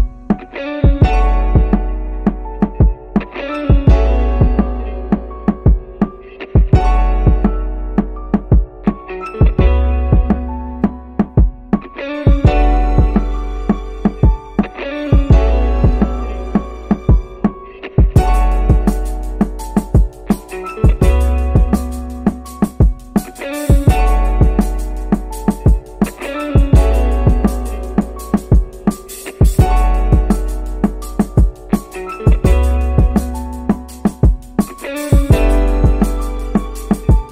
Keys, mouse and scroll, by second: 2.8-4.0 drag, 4.8-5.5 scroll down 4, 5.5 middle click, 6.3-7.1 scroll up 1, 8.0-9.7 drag, 11.2-13.2 drag, 14.6 middle click, 16.4 click, 18.6 click, 26.4 space, 27.7-28.1 scroll up 1, 28.3 shift+middle click, 29.2-30.3 scroll up 7, 30.7 shift+middle click, 32.3 g.